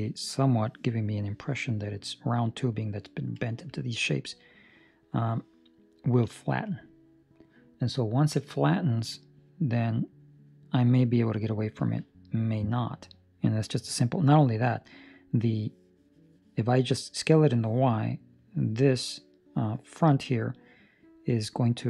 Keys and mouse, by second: 0.0 middle click, 1.9 middle click, 4.0 middle click, 10.1 middle click, 16.3 middle click, 17.8 middle click, 18.6 middle click, 19.0 middle click, 20.1 middle click.